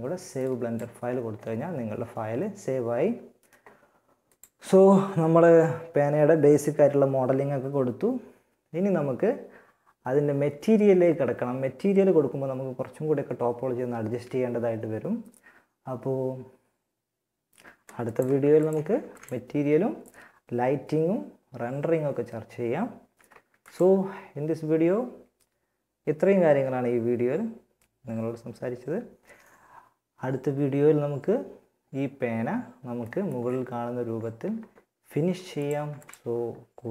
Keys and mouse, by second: 17.6 ctrl+s, 18.1 ctrl+s, 22.7 ctrl+s, 34.7-36.8 drag, 35.0 ctrl+s.